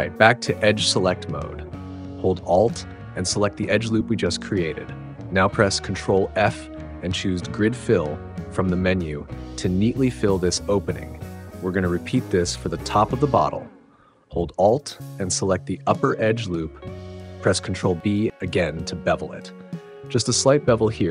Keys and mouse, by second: 1.8 click, 4.7 alt+click, 7.1 ctrl+f, 18.1 ctrl+b.